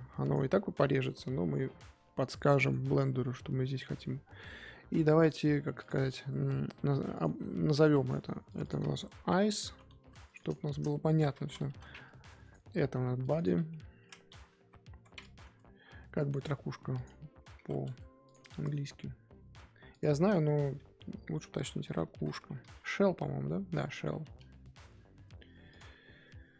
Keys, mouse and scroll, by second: 0.9 click, 1.1-1.8 scroll down 3, 1.8 middle click, 2.2 Tab, 2.5-2.9 middle drag, 2.9 z, 3.1 scroll up 2, 3.3 z, 5.4-5.8 scroll up 2, 5.8 click, 7.1 click, 7.7 click, 8.4 click, 8.6-11.7 drag, 12.4 click, 13.2 click, 13.3-16.4 drag, 25.7 click.